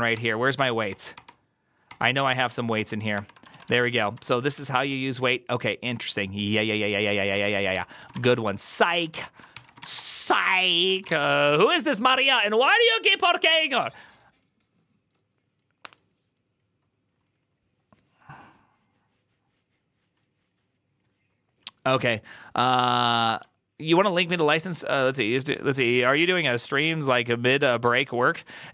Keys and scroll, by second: 0.0 ctrl+d, 0.4 ctrl+d, 0.8 ctrl+d, 1.8 ctrl+d, 2.6 ctrl+d, 3.0 ctrl+d, 3.3-5.2 typing, 7.2-11.5 typing, 7.6 ctrl+c, 7.7 ctrl+c, 8.8 ctrl+a, 9.4 ctrl+c.